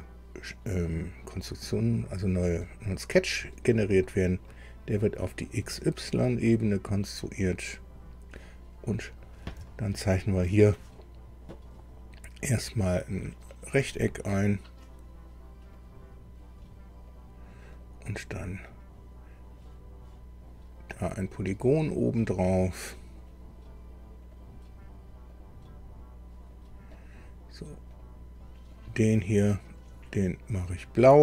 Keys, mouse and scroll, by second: 2.6 click, 3.9 scroll down 1, 4.4 middle click, 6.1 click, 7.7 click, 8.8-9.1 scroll up 1, 9.6 shift+middle click, 13.7 click, 15.7 click, 17.1 click, 17.7 right click, 18.3-18.8 scroll up 1, 22.7 click, 24.2 click, 25.3 click, 26.5 click, 26.9 right click, 27.9 right click, 28.7 click, 30.8 click.